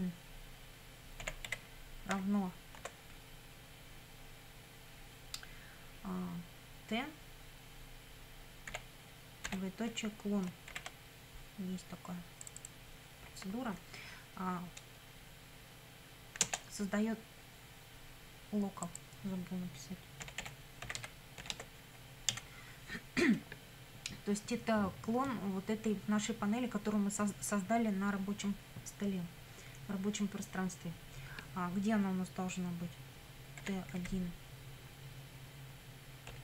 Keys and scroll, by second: 1.0-2.8 typing, 8.7 t, 9.5 shift+;, 10.7 shift+c, 16.4 Return, 20.0-21.9 typing, 22.3 Down, 33.6 t, 34.0 1, 36.3 ..